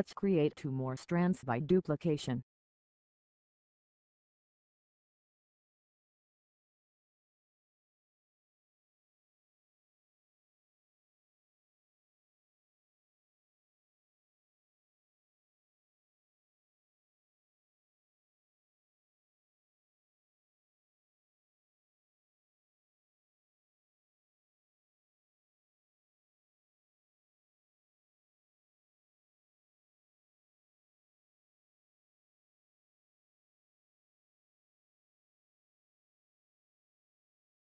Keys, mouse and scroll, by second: 0.3 click, 25.0 click, 27.4 click, 30.3 click, 35.2 Pause.